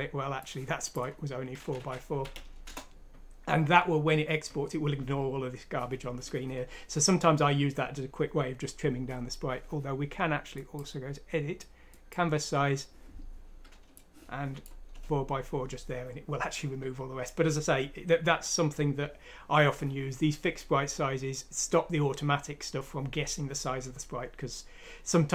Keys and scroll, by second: 1.6-2.7 typing, 14.9 Return.